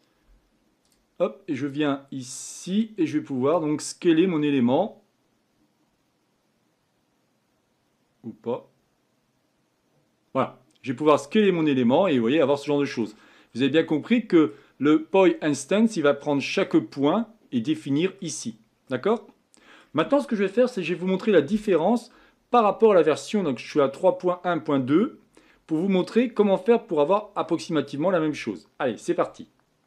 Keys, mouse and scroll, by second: 2.6-6.5 drag, 11.8-13.2 middle drag, 13.2-14.1 scroll down 3, 16.3-21.9 middle drag, 21.9-25.5 scroll down 3, 25.7-29.8 middle drag.